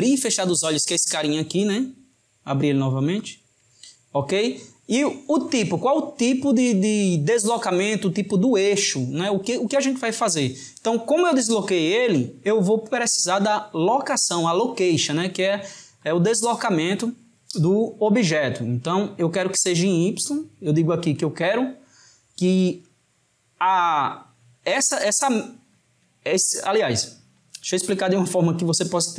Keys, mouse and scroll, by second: 2.2-5.2 right drag.